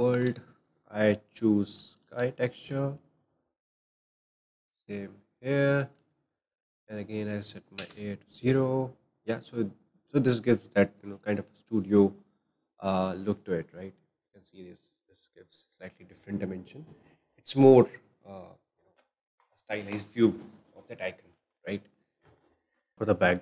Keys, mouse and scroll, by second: 0.1 shift+a, 2.7 shift+a, 4.0 click, 5.4 click, 5.7-6.2 scroll up 3, 6.2-7.3 shift+middle drag, 7.3-10.7 drag, 22.9 click, 22.9-23.4 scroll up 6.